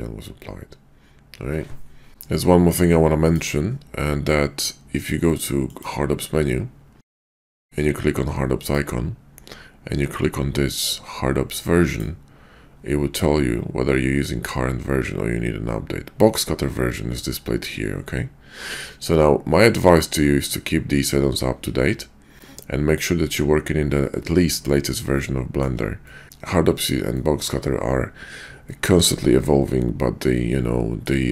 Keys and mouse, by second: 5.7-24.6 drag, 25.1-25.6 shift+drag, 26.0 middle click, 27.1 shift+middle click, 28.6-31.1 middle drag.